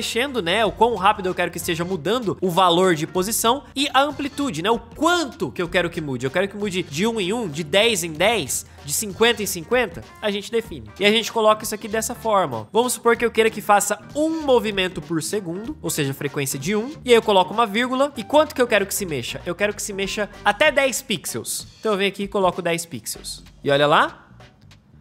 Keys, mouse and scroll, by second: 23.5 space.